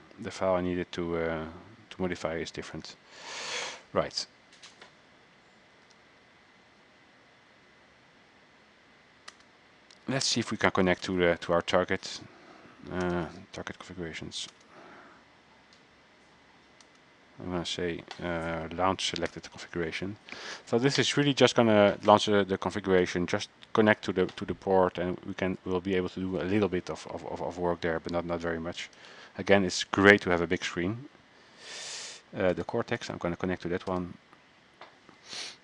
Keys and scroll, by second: 3.0 alt+Tab, 3.5 alt+Tab, 5.9 alt+Tab.